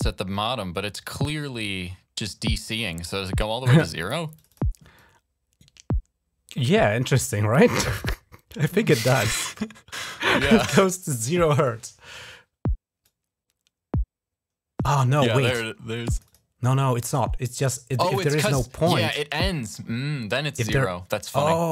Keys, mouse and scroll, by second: 4.1 click, 4.3 click, 4.7-9.8 drag, 11.3 click, 12.8-15.2 drag, 15.9 click, 16.0 click, 16.5-17.8 drag, 18.8-21.7 drag.